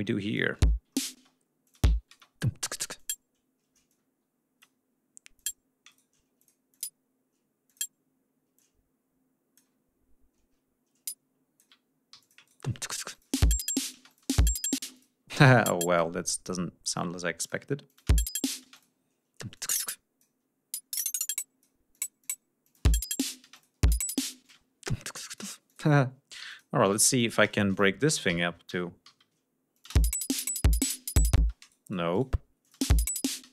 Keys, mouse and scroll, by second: 0.2 click, 0.5 space, 1.6 ctrl+click, 1.9 ctrl+scroll up 2, 2.9 click, 3.8 click, 5.3 click, 5.8 shift+right click, 6.3 shift+click, 6.7 shift+click, 7.6 click, 8.5 alt+click, 11.0 alt+click, 12.0 alt+g, 12.1 shift+click, 12.4 shift+right click, 13.0 shift+click, 13.2 space, 13.9 space, 14.0 click, 14.9 click, 15.1 e, 15.5-16.1 drag, 16.9 click, 17.8 alt+click, 17.9 alt+space, 18.6 space, 18.6 click, 19.5-20.3 drag, 20.7-21.7 drag, 21.9 click, 22.6 click, 22.7-26.9 typing, 23.5 click, 25.2 click, 25.6 click, 26.4 click, 26.8-27.3 drag, 27.4 shift+right click, 27.6 shift+click, 28.2 alt+d, 29.7 click, 29.9 space, 31.3 space, 31.5 right click, 32.1 shift+right click, 32.5 shift+click, 32.7 shift+space, 33.4 space.